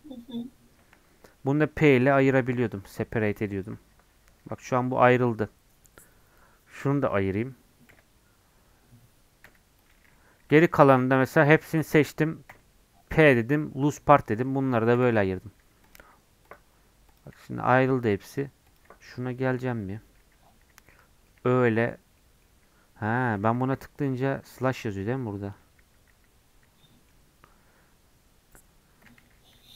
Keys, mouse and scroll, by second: 15.6 Tab, 15.8-20.2 drag, 20.2 \, 20.7 /, 21.3 middle click, 21.6 Tab, 22.2-23.6 middle drag, 23.6 m, 24.3 /, 25.4 /, 25.8 /, 26.1 /, 26.8-29.3 middle drag, 29.3 a.